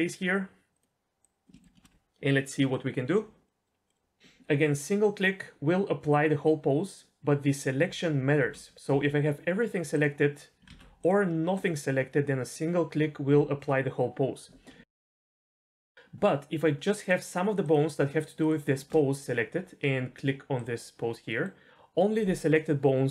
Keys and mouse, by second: 0.7 click, 1.2 click, 1.5 shift+middle drag, 3.4 middle click, 3.9 middle click, 8.4 ctrl+z, 8.9 a, 10.7 ctrl+z, 11.0 click, 11.5 click, 14.8 ctrl+z, 15.3 middle click, 15.7 shift+middle click, 15.9 ctrl+z, 17.0 shift+middle click, 17.6 shift+click, 20.5 click, 21.3 middle drag.